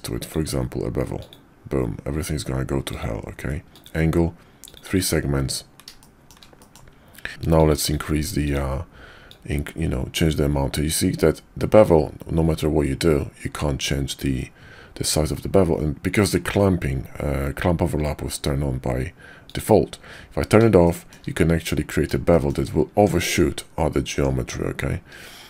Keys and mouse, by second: 0.3-1.2 drag, 2.8-3.8 drag, 6.0 shift+click, 6.6 click, 7.5-8.5 drag, 9.4-15.9 drag, 19.5 click, 20.8 shift+drag, 22.3 shift+drag, 22.9 Tab, 24.1 Tab.